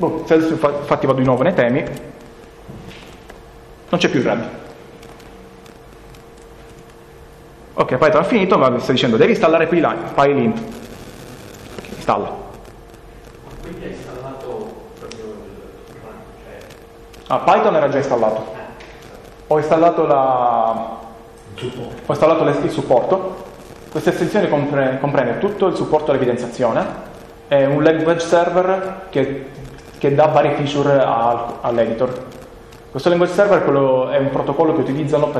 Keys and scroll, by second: 1.2 ctrl+k, 2.9-3.7 typing, 6.8 ctrl+BackSpace.